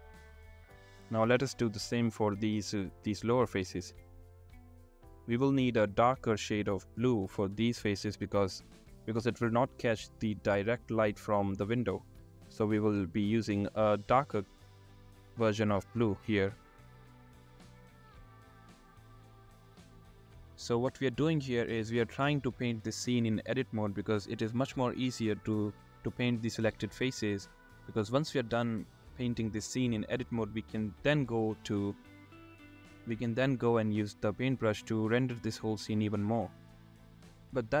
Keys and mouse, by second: 0.0 shift+click, 2.0 shift+click, 2.3 shift+click, 4.5 shift+click, 5.1 ctrl+click, 7.5 ctrl+click, 8.6 middle click, 9.5 ctrl+click, 9.7 middle click, 10.7 shift+click, 11.6 middle click, 12.7 middle click, 13.2 shift+click, 13.4 middle click, 15.1 shift+click, 18.8 shift+click, 20.7-21.5 drag, 22.2 drag, 23.0 click, 23.2 shift+click, 23.7 click, 26.7 shift+click, 27.4 shift+click, 27.4 middle click, 27.9 middle click, 28.6 shift+click, 28.8 middle click, 29.1 middle click, 30.8 ctrl+z, 30.8 ctrl+z, 31.9 middle click, 32.4-33.6 middle drag, 34.4 middle click, 35.1 middle click, 35.4 middle click, 36.1 shift+click.